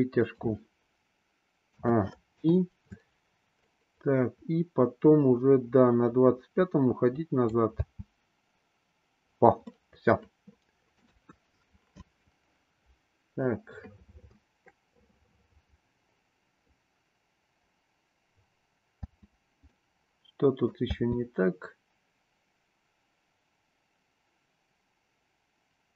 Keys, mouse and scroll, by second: 1.6 a, 2.4 i, 3.6-7.5 drag, 7.7 space, 9.7-11.1 middle drag, 11.1 KP_1, 19.1 space, 19.7-20.9 middle drag, 21.0 space.